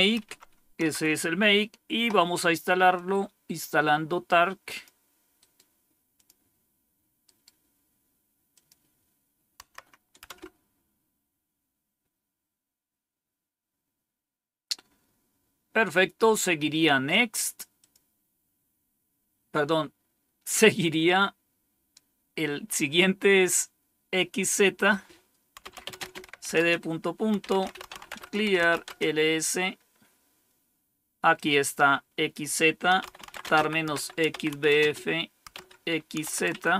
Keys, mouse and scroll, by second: 0.1 Up, 0.7 Down, 2.8-4.7 drag, 5.3 right click, 6.0 click, 7.1 right click, 8.4 click, 9.5 Right, 10.2 Return, 17.7 click, 18.4 click, 24.6 click, 25.3-29.1 typing, 31.2-32.2 drag, 32.6-36.7 typing.